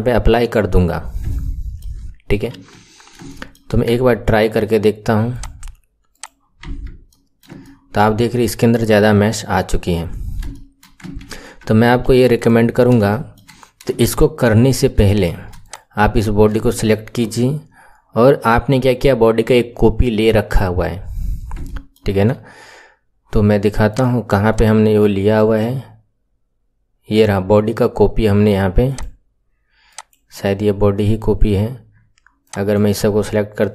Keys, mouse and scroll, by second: 0.5-1.2 scroll down 10, 1.2 shift+middle click, 2.0-2.4 scroll down 2, 2.4 KP_1, 2.9-3.2 scroll up 2, 3.2 shift+middle click, 3.9 Tab, 5.2-6.6 drag, 6.6 Tab, 7.0-8.2 middle drag, 8.2-9.7 scroll up 8, 9.7-10.4 scroll down 10, 10.4 shift+middle click, 11.3 ctrl+z, 11.8 KP_1, 12.3 click, 12.6-13.0 scroll down 1, 13.0-13.5 shift+middle drag, 13.5-13.9 scroll down 1, 13.9-14.6 shift+middle drag, 14.6 scroll up 5, 15.0-15.6 shift+middle drag, 15.6 click, 16.1-16.6 scroll down 2, 16.6-19.6 shift+middle drag, 20.8-21.3 scroll up 2, 21.6-23.8 shift+middle drag, 23.8 click, 24.4 click, 29.0 click, 29.8 click, 31.5-32.4 scroll down 2, 32.4 click.